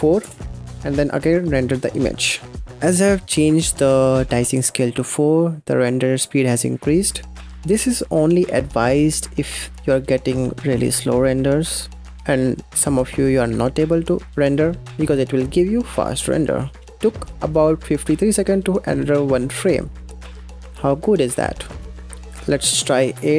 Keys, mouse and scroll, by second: 0.6-2.7 drag, 22.2-23.3 drag.